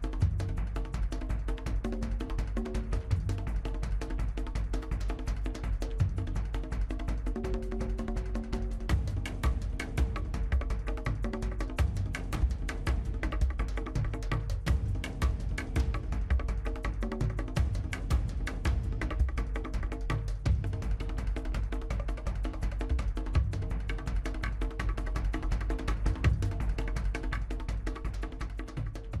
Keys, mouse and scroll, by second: 0.0-0.7 scroll down 3, 0.1 shift+middle click, 0.4 middle click, 0.5 Tab, 0.7 middle click, 0.8-1.5 scroll up 6, 0.9 shift+middle click, 1.3 shift+middle click, 1.5 shift+middle click, 1.6 click, 1.8-2.2 middle drag, 2.2 scroll down 2, 2.3 scroll up 1, 2.4 shift+middle click, 3.0 click, 3.1 shift+middle click, 3.5 KP_1, 3.8 shift+z, 4.3 shift+middle click, 4.4 scroll down 3, 4.5 shift+middle click, 5.3-5.7 shift+middle drag, 5.7-6.4 drag, 6.5 middle click, 8.3 middle click, 8.4-9.0 scroll up 6, 8.5 middle click, 8.7 shift+z, 8.8 middle drag, 9.0 shift+middle click, 9.4-9.9 scroll down 6, 9.6 shift+middle drag, 9.9 click, 10.0 shift+middle click, 10.5 click, 11.0 click, 11.2 scroll down 2, 11.2 middle click, 11.3 scroll up 4, 11.5 shift+middle click, 11.8 click, 12.0 shift+middle click, 12.2 Tab, 12.5 middle click, 12.7 click, 13.8 click, 15.0 click, 16.1 click, 16.3-16.6 scroll down 4, 16.3 middle click, 16.8 click, 17.2 scroll down 1, 17.3 shift+middle click, 17.5 click, 17.6 Tab, 17.8 scroll down 1, 18.2-18.9 middle drag, 19.2 scroll up 5, 19.4 shift+middle click, 19.5 click, 19.7 shift+middle click, 20.2 click, 20.3-20.7 scroll down 2, 20.3 middle click, 20.7 Tab, 20.8 middle click, 21.1 2, 21.2 scroll down 1, 21.3 middle click, 21.5 a, 21.7 shift+middle click, 22.1 scroll up 1, 22.2 shift+middle click, 22.8 click, 23.0 scroll down 1, 23.1 middle click, 23.3 scroll up 2, 23.4 shift+middle click, 23.6 click, 23.7 scroll down 1, 23.8-24.9 shift+middle drag, 25.0 click, 25.4 scroll down 1, 25.5 middle click, 25.6 scroll up 2, 25.7 shift+middle click, 25.8 click, 25.9 middle click, 26.1 Tab, 26.3 scroll down 1, 26.3 middle drag, 26.5 scroll up 1, 26.6 shift+middle click, 26.6 scroll down 1, 26.7 shift+middle click, 27.1 click, 27.3-28.0 middle drag, 28.1 click, 28.2 middle click, 28.4-29.2 scroll up 2, 28.4-28.9 middle drag.